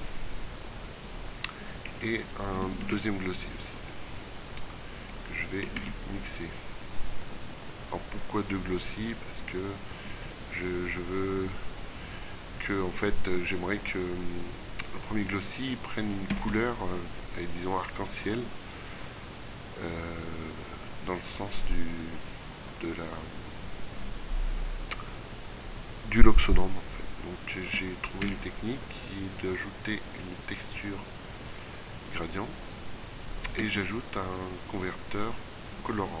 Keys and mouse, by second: 1.1 click, 2.8 shift+d, 5.8 shift+a, 14.5-16.4 drag, 16.4 a, 16.6 z, 16.7-18.4 middle drag, 19.6 middle click, 27.7 shift+a, 33.5 shift+a.